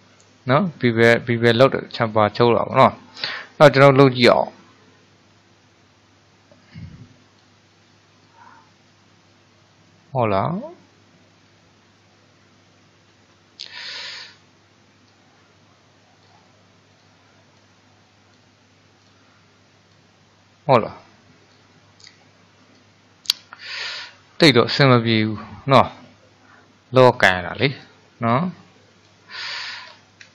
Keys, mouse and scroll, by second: 2.1-7.4 drag, 8.3-12.5 drag, 15.1-17.2 drag, 17.6-19.2 drag, 20.0-25.9 drag, 27.9-29.5 drag, 29.5-30.3 scroll down 4.